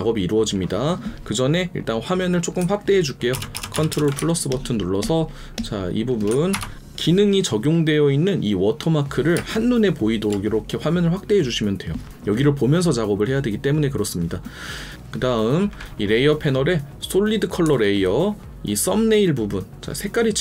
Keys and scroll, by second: 3.3 ctrl+KP_Add, 4.1 space, 6.5 ctrl+KP_Subtract.